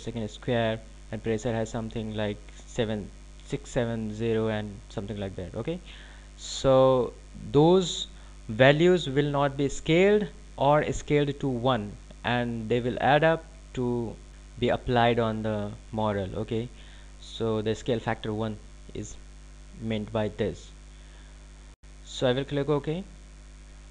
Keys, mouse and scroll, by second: 23.8 click.